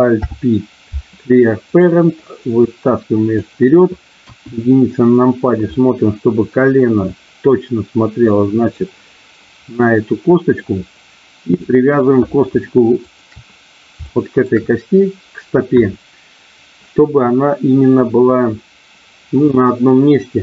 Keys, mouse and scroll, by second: 0.2 alt+p, 2.4 click, 4.2 KP_1, 5.7 middle click, 7.1-8.7 drag, 9.8 middle click, 11.6 middle click, 13.1 shift+click, 14.1 shift+middle click.